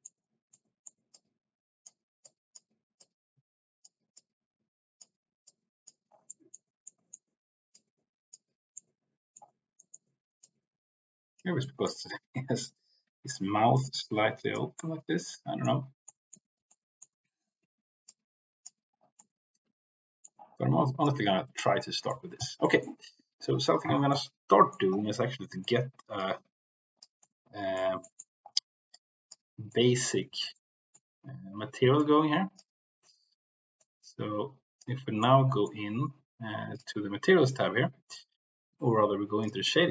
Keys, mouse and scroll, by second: 0.5 middle click, 1.1 click, 2.2 click, 2.9 click, 4.1 click, 5.4 click, 6.3 middle click, 6.9 middle click, 7.7 click, 8.7 middle click, 9.7 middle click, 10.4 click, 11.6 middle click, 12.7 click, 13.7 click, 14.7 middle click, 16.1 middle click, 16.5 ctrl+z, 16.6 middle click, 18.0 click, 19.1-20.3 middle drag, 20.9 click, 22.1 middle click, 22.6 middle click, 24.0 middle click, 25.0 middle click, 26.2 click, 27.2 middle click, 28.0 middle click, 28.9 click, 29.6 middle click, 30.5 middle click, 31.9 click, 33.7-34.8 drag, 35.2 middle click, 36.7 click.